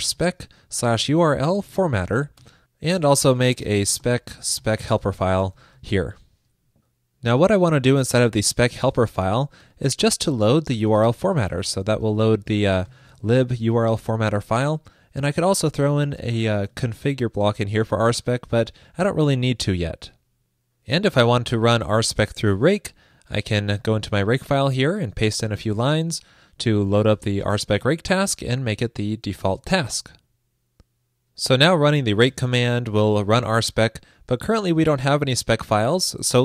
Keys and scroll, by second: 16.4 super+Return, 17.0 super+s, 25.7 super+v, 30.0 super+s.